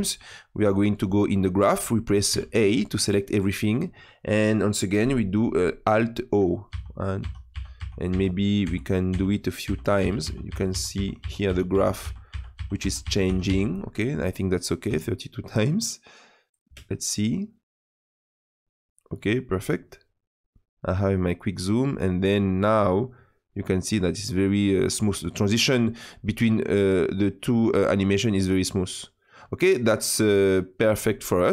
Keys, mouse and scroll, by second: 0.2-6.7 drag, 6.7 alt+o, 7.2 alt+o, 7.5 alt+o, 7.8 alt+o, 8.1 alt+o, 8.6 alt+o, 9.1 alt+o, 9.6 alt+o, 10.0 alt+o, 10.2 alt+o, 10.5 alt+o, 10.7 alt+o, 10.9 alt+o, 11.2 alt+o, 11.5 alt+o, 11.7 alt+o, 12.0 alt+o, 12.3 alt+o, 12.5 alt+o, 12.8 alt+o, 13.0 alt+o, 13.3 alt+o, 13.5 alt+o, 15.6 click, 16.6 space, 25.2 space, 26.3-30.0 drag.